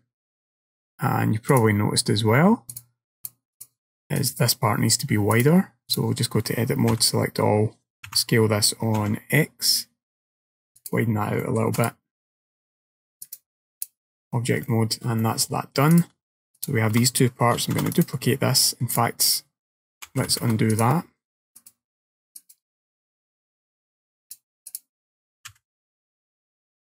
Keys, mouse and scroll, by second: 1.6 click, 2.8 click, 3.3 click, 4.2 click, 5.4 click, 7.0 a, 8.1 s, 11.5 middle click, 11.8 click, 12.3-13.3 scroll down 3, 13.3 click, 13.3-13.9 scroll down 1, 14.3 scroll down 2, 14.7 shift+middle click, 15.3 middle click, 16.0 click, 16.6 shift+click, 17.8 shift+d, 19.0 click, 26.5 click, 26.5 g.